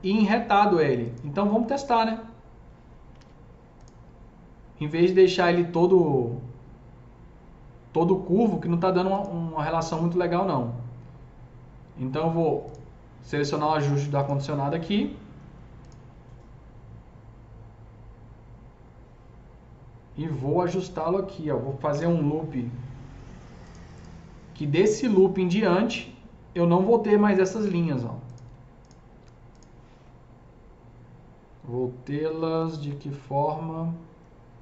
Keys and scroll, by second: 3.2 alt+q, 22.0 KP_0.